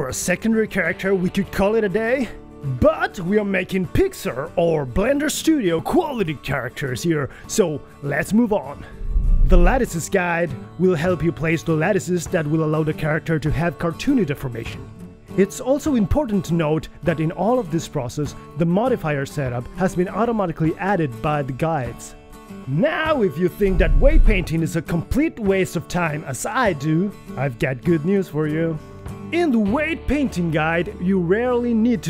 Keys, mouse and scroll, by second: 0.8 r, 1.9 KP_3, 2.3 r, 4.4 g, 5.3 r, 5.6 KP_1, 6.2 alt+a, 6.4 alt+r, 6.4 alt+s, 6.7-8.6 typing, 8.4 alt+g.